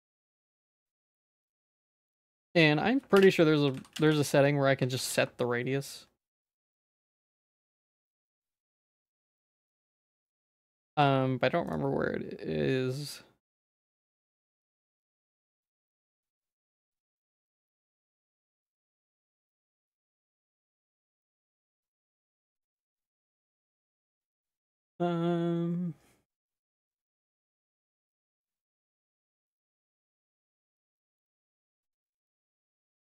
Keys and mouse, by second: 0.5 alt+s, 1.2 Tab, 1.3 middle click, 1.9 ctrl+s, 2.1 middle click, 2.3 Tab, 2.5 a, 3.2 F3, 10.9 ctrl+s, 11.7-17.5 drag, 18.4 click, 19.2 click, 19.5 click, 20.7-27.0 drag, 27.4-32.7 drag.